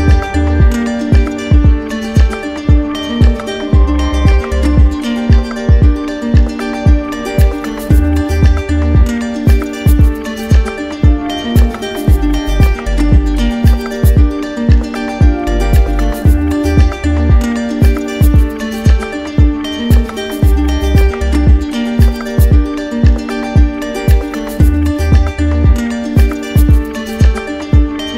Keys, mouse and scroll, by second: 0.6 click, 2.4 click, 3.7 ctrl+click, 5.6 alt+click, 9.8 click, 10.8 click, 13.5 click, 14.3 ctrl+click, 19.0 click, 20.3 shift+click, 26.8 click.